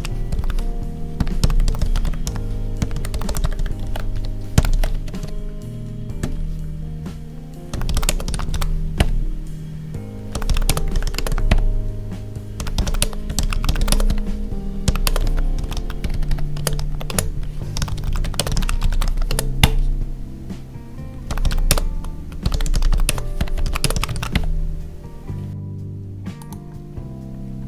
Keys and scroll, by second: 3.8 ctrl+s, 4.1 Right, 4.6 ctrl+s, 5.0 Down, 6.1 ctrl+`, 8.0 space, 10.6 space, 11.1 space, 12.9 space, 13.8 space, 15.0 space, 16.5 space, 17.0 space, 18.3 space, 19.2 space, 21.6 space, 23.0 space, 23.7 space.